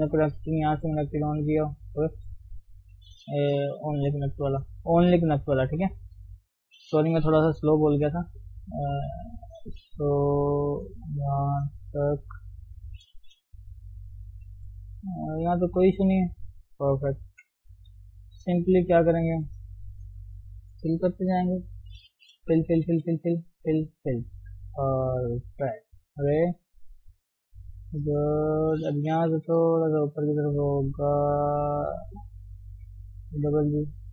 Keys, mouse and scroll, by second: 2.4 click, 3.0 shift+middle click, 3.7 g, 6.2 click, 6.7 shift+middle click, 7.4 g, 8.7 click, 9.9 g, 11.0-11.4 scroll down 1, 11.4 shift+middle click, 11.7-12.4 scroll up 3, 12.4 click, 12.9 shift+middle click, 13.4 g, 14.5 scroll down 1, 14.7-17.0 middle drag, 17.0 KP_3, 17.2-17.8 scroll up 1, 17.8 click, 18.5-18.9 scroll down 1, 18.9 shift+middle click, 19.5 scroll up 3, 19.7 shift+middle click, 20.8 click, 21.3 scroll down 2, 21.5 middle click, 22.1-22.4 scroll down 1, 22.4-24.0 typing, 24.6 Tab, 25.0 middle click, 25.7-26.2 scroll down 2, 26.2 KP_3, 26.5-26.8 scroll up 1, 26.8 Tab, 27.2 scroll up 1, 28.5 click, 29.4 g, 31.4 click, 31.6 g, 32.5 click, 32.8 g, 33.7 click.